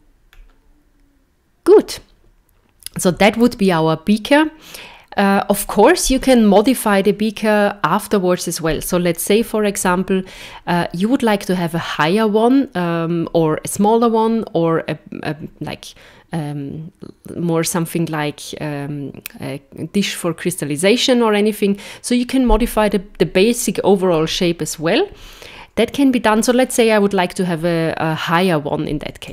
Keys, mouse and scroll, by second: 0.3 scroll down 2, 9.4 z.